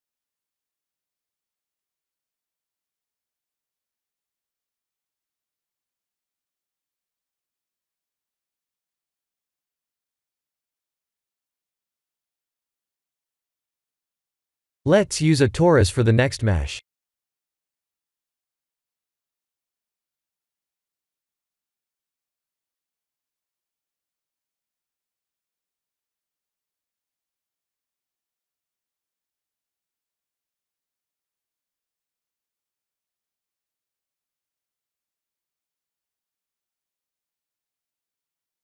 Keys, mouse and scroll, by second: 0.2 click, 3.0 click, 5.0 click, 6.3 click, 6.7 middle click, 7.2 middle click, 7.8 KP_1, 9.7 click, 9.9 middle click, 11.1 middle click, 11.8 middle click, 12.6 middle click, 13.5 middle click, 13.8 middle click, 14.6 KP_1, 15.4 click, 16.0 shift+a, 21.9 r, 24.4 s, 27.9 g, 29.8-30.1 scroll up 3, 30.3 shift+middle click, 31.1-31.5 scroll up 2, 34.0 g.